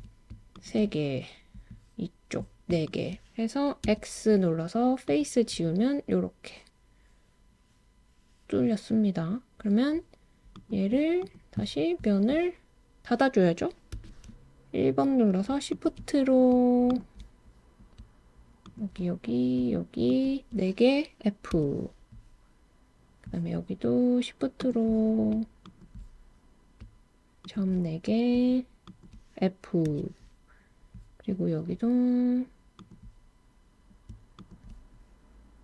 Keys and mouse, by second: 3.8 x, 10.5 right click, 15.7 shift+click, 16.9 shift+click, 18.7 shift+click, 21.5 f, 24.6 click, 25.7 shift+click, 27.5 shift+click, 28.9 shift+click, 29.9 f, 34.4 shift+click.